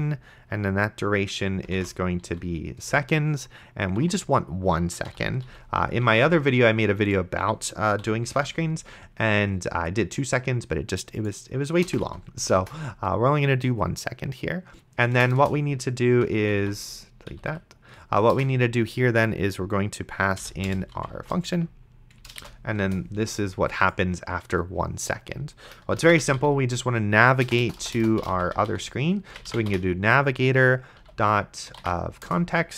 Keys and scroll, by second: 1.8-2.7 typing, 2.8 Return, 4.0 1, 5.1 End, 5.5 ,, 6.3 ctrl+s, 8.0 ,, 8.6 ctrl+s, 11.9 BackSpace, 12.1 ;, 12.6 BackSpace, 15.1 BackSpace, 16.8 ctrl+z, 17.3 Left, 18.3 BackSpace, 20.4-22.7 typing, 22.8 Return, 25.7-32.3 typing.